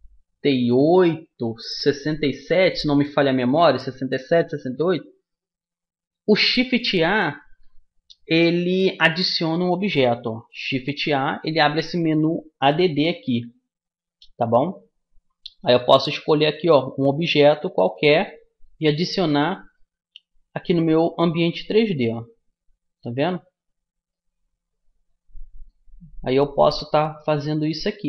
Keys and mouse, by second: 3.7-9.5 middle drag, 11.2 shift+a, 19.5 middle click, 20.2 click, 20.3 middle click, 22.4-23.7 drag, 23.7 middle click, 23.8 click, 24.1-25.5 middle drag, 25.5-28.0 drag.